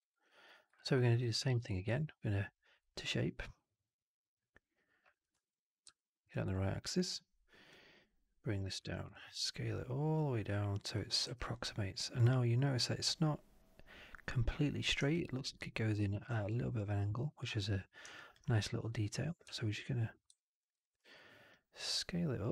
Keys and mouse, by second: 0.3 click, 0.6 alt+middle drag, 1.3 shift+Tab, 7.6 click, 8.7 r, 11.1 w, 20.8 r, 21.4-22.5 drag.